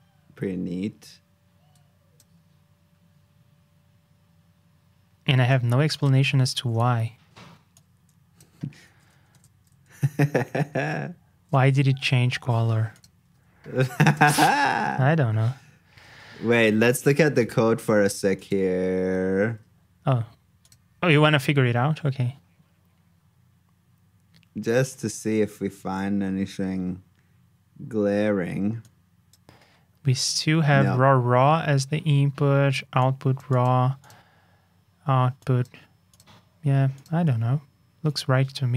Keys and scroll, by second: 8.8 super+c, 9.3 super+j, 14.1 super+j, 16.0 super+Tab, 19.4 super+Tab.